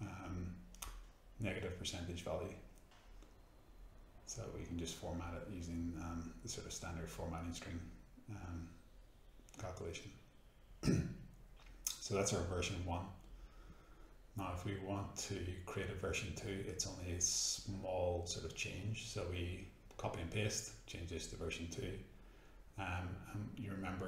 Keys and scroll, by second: 1.6-4.6 typing, 5.8 shift+', 6.7 shift+0, 7.5 Return, 10.6 F9, 14.7 ctrl+c, 16.9 ctrl+v, 18.7 BackSpace, 18.8 2.